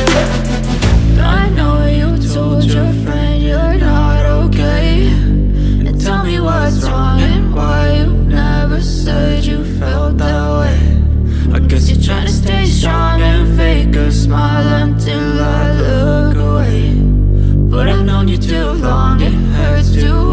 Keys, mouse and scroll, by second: 9.8 double click, 14.1 double click.